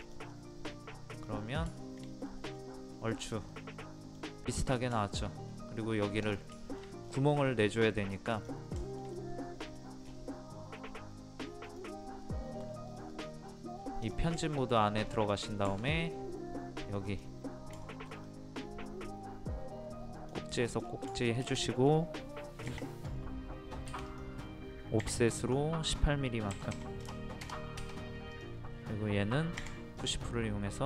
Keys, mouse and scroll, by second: 0.0 click, 0.3 middle click, 1.2-1.5 scroll down 1, 1.8 shift+middle click, 2.9-3.5 scroll up 1, 3.5-4.6 middle drag, 5.5 scroll up 1, 6.2 click, 6.6 shift+middle click, 6.8 scroll up 1, 7.7 middle click, 8.4 click, 8.8 shift+middle click, 9.8 scroll down 1, 11.7 click, 12.2 middle click, 12.9 click, 13.5 scroll up 1, 14.0 click, 14.4 shift+middle click, 15.0 scroll up 1, 15.7 typing, 17.1 click, 17.9-19.6 shift+middle drag, 20.1 click, 20.5-20.8 scroll down 1, 21.1 shift+middle click, 22.7 o, 24.1 click, 26.5 KP_1, 28.3 click, 29.6 p, 30.0 click.